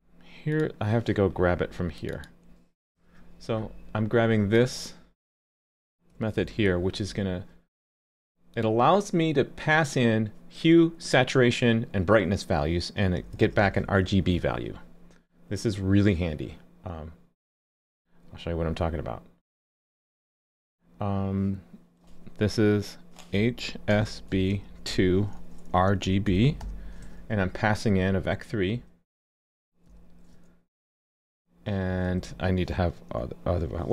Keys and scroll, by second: 3.0 super+b, 6.3 super+c, 13.4 super+v.